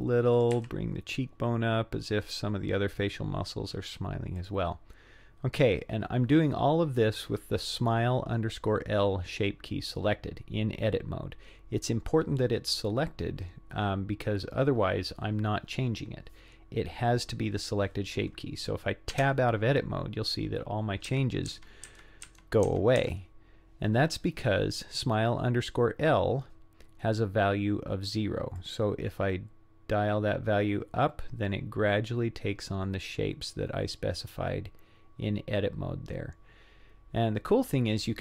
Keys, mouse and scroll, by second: 0.4 click, 0.6 g, 19.2 Tab, 21.1 Tab, 21.5 Tab, 21.9 Tab, 22.3 Tab, 22.7 Tab, 23.0 Tab, 28.6-38.2 drag.